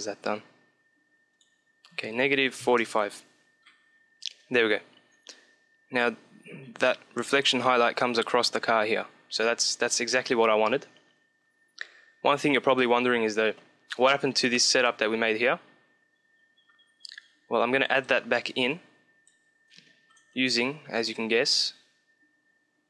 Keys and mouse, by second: 1.1-3.0 drag, 3.0 middle click, 12.4-14.3 middle drag, 17.2-20.1 drag, 19.2 shift+a, 20.1-22.7 middle drag.